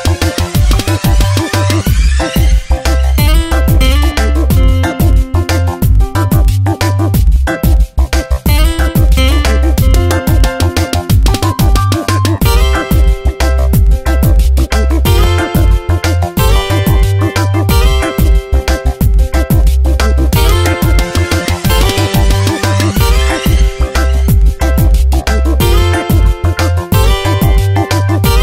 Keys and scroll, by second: 0.0 s, 6.1 v, 7.2 ctrl+z, 9.5 ctrl+shift+n, 9.8 Return, 12.4 b, 15.8 ctrl+z.